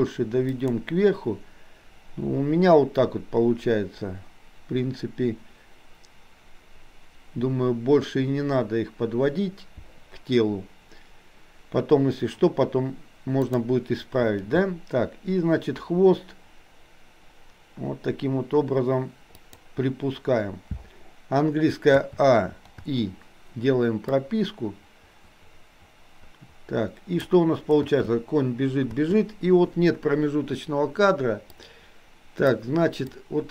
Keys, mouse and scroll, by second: 13.5 click, 14.7 g, 22.0 a, 22.9 i, 24.3-27.4 drag, 27.9 space, 31.8 click, 31.8 space, 33.0 click.